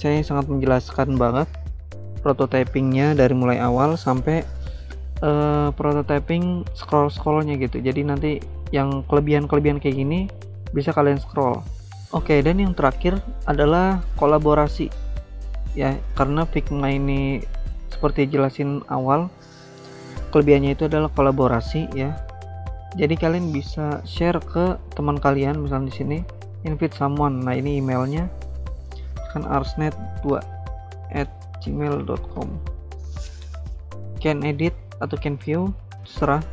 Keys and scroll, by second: 12.0 alt+Tab, 29.2-32.4 typing.